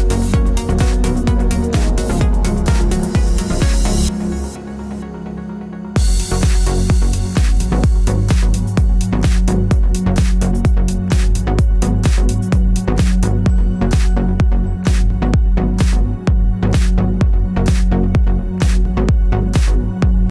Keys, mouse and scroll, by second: 2.0-20.3 drag.